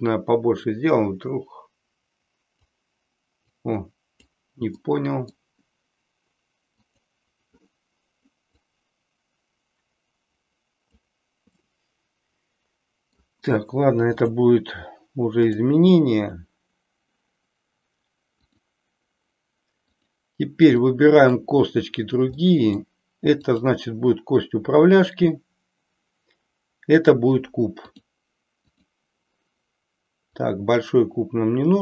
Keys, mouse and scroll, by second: 3.5 click, 4.9 middle click, 6.9 click, 8.5-11.0 drag, 11.6-13.2 middle drag, 15.5 click, 18.4 click, 20.8-21.4 middle drag, 22.4-22.9 middle drag, 23.5 click, 27.0-28.1 drag, 28.6 click, 30.2-31.8 drag.